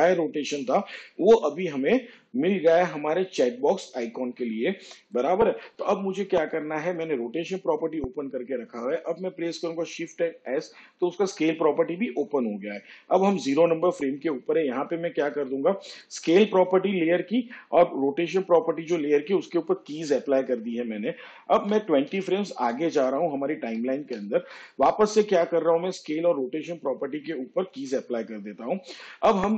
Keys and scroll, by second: 7.7 ctrl+z, 12.4 shift+s, 25.3 shift+Page_Down.